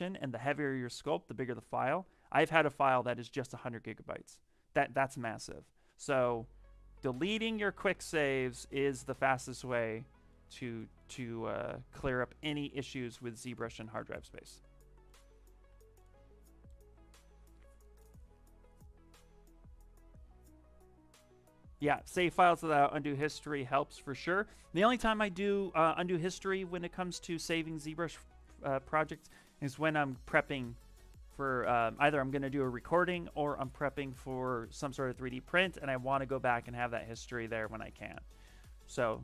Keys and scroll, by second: 13.6 shift+f, 37.2 s.